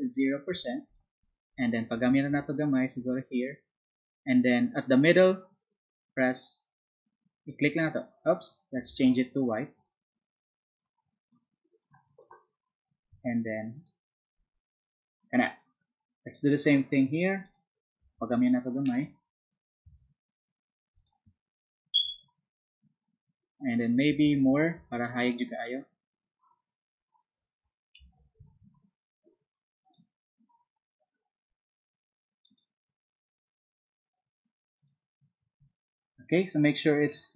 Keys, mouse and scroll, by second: 0.8 alt+click, 6.3 click, 9.7 ctrl+z, 9.7 click, 10.8 click, 11.8 click, 12.2 click, 13.7 click, 17.4 click, 20.9 click, 25.3 click, 28.0 ctrl+z, 29.8 click, 32.4 click, 34.7 click, 37.3 click.